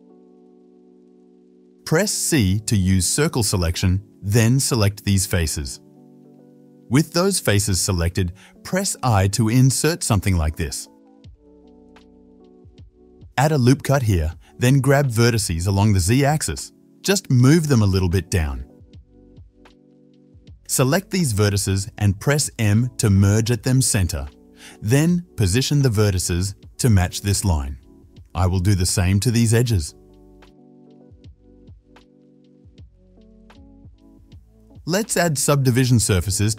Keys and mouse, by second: 1.0 middle click, 1.7-7.6 drag, 2.4 3, 3.4 c, 7.6-13.2 shift+middle drag, 9.8 i, 11.7 shift+z, 13.2-21.2 ctrl+drag, 13.3 ctrl+r, 19.3 KP_7, 21.2-22.4 middle drag, 21.4 1, 21.9 shift+z, 22.4-28.9 drag, 23.8 m, 28.9 middle click, 29.9 shift+click, 30.0-32.3 shift+middle drag, 30.7 m, 32.3-34.9 drag, 33.5 m, 34.2 shift+z, 34.5 Tab, 35.5-36.5 drag.